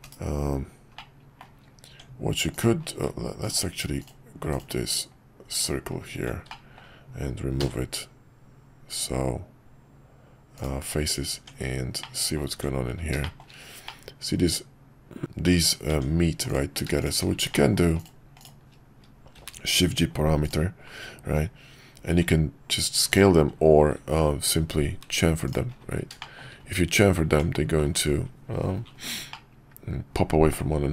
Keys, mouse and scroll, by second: 0.0 KP_Divide, 1.0 middle click, 1.9 Tab, 4.0 ctrl+click, 4.6 click, 5.5 ctrl+click, 6.7 middle click, 11.3 Tab, 12.0 middle click, 13.2 middle click, 13.8-15.2 middle drag, 15.9 Tab, 17.0 click, 17.5 middle click, 17.9 click, 19.3 shift+g, 22.1 s, 24.0 ctrl+b, 26.3 middle click, 27.3 Tab, 29.3-30.5 middle drag.